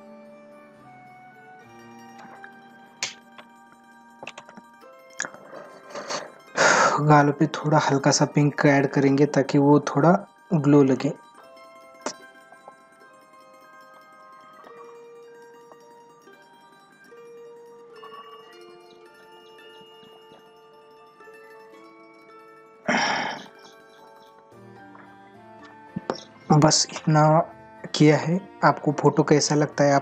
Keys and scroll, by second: 24.6 ctrl+=.